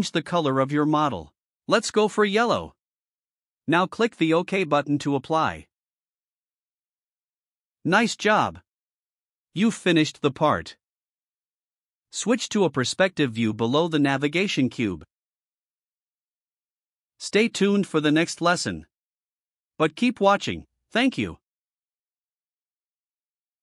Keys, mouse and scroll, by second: 2.2 click, 4.7 click, 6.2 click, 12.6 click, 15.5 click, 16.9-19.1 drag.